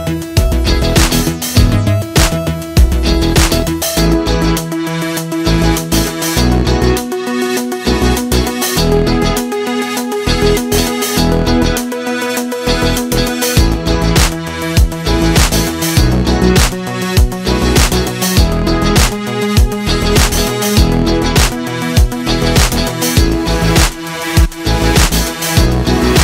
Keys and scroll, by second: 4.4 shift+m, 6.0 a, 8.0 Delete, 12.1 Delete, 12.7 Delete, 14.6 z, 14.7 space, 15.5 v, 22.2 z, 22.3 space, 22.9 v, 25.9 i.